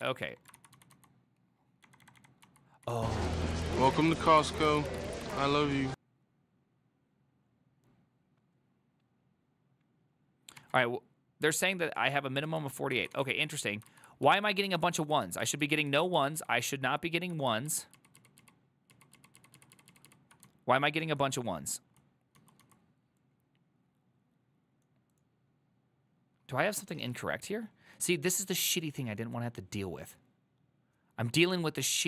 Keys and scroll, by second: 0.0 ctrl+g, 0.0 ctrl+c, 0.6 ctrl+c, 0.8-5.5 typing, 10.7 alt++, 12.6 alt+{, 13.1 ctrl+a, 13.2 [, 13.4 ctrl+u, 14.0 ctrl+u, 14.4 ctrl+u, 14.7-20.5 ctrl+u, 20.5-22.9 typing.